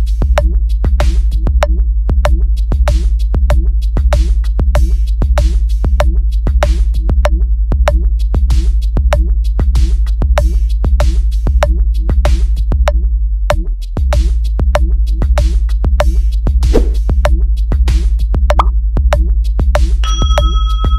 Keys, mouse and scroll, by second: 0.2 click, 1.8 click, 2.8 click, 3.6 click, 4.3 click, 4.9 click, 5.3 click, 6.4 click, 7.1 click, 7.6 click, 8.5 right click, 10.0 right click, 12.3 click, 12.9 click, 15.9 right click, 17.1 click, 17.9 click, 18.8 click, 19.8 click.